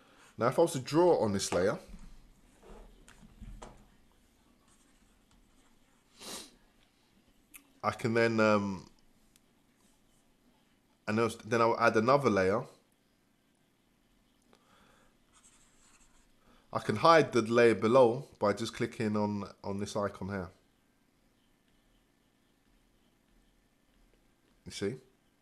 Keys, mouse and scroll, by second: 23.3 click, 24.0 click, 24.5 click.